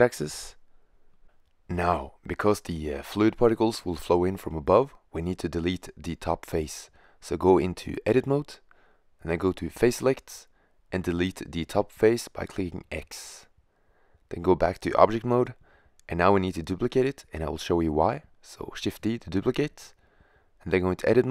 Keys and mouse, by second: 0.3 click, 9.5 click, 10.2-11.2 right drag, 11.2 click, 11.3 x, 11.3 click, 17.1 shift+d, 18.6-20.0 drag.